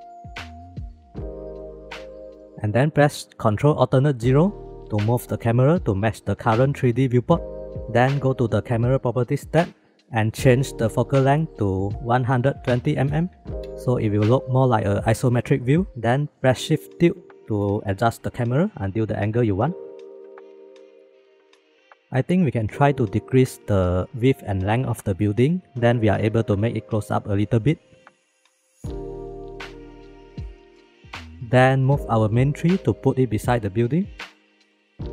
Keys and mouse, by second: 1.1 shift+middle click, 1.4 middle click, 2.0-2.3 shift+middle drag, 4.1 ctrl+alt+KP_0, 11.0-13.7 drag, 17.6 shift+`, 23.8 click, 26.1 click, 30.2 shift+`, 33.4-34.4 drag.